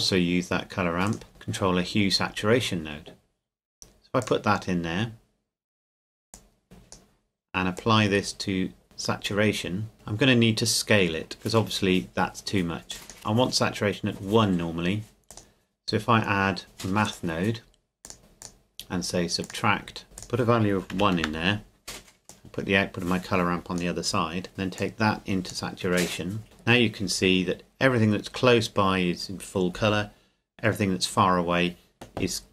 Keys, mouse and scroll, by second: 4.2 click, 12.9 click, 15.3 click, 17.0 click, 18.4 click, 20.0 KP_Enter, 20.2 click, 20.9 KP_1, 21.2 KP_Enter, 22.3 click.